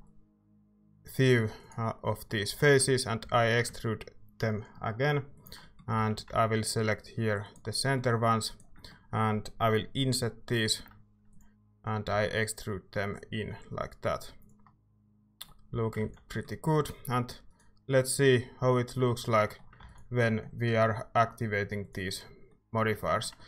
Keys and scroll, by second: 3.2 e, 5.7-6.8 typing, 10.0 i, 12.1 e, 14.9 Tab, 15.7 a, 16.0 ctrl+s, 19.8 ctrl+s, 22.9 Tab.